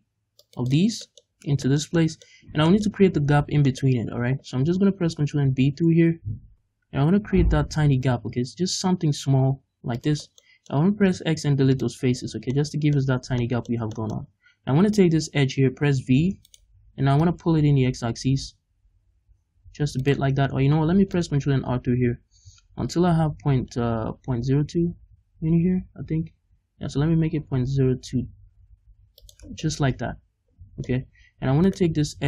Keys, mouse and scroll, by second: 0.6 click, 1.0-10.0 middle drag, 1.3-1.6 scroll up 1, 3.3-4.4 scroll up 4, 4.4-5.4 scroll up 1, 5.4 ctrl+b, 10.0 shift+click, 10.2 scroll down 2, 10.3 middle click, 10.7 scroll up 2, 11.0 x, 12.1 scroll down 2, 12.3 Tab, 12.5 middle click, 13.2 Tab, 13.4-14.8 middle drag, 14.8 right click, 15.2-16.0 scroll up 2, 16.0 v, 16.5 right click, 17.2-20.1 drag, 20.3-20.9 scroll up 1, 20.9 ctrl+r, 29.4 scroll down 1, 29.6-31.6 middle drag, 29.8 click, 30.9-31.6 scroll up 2, 31.6 right click.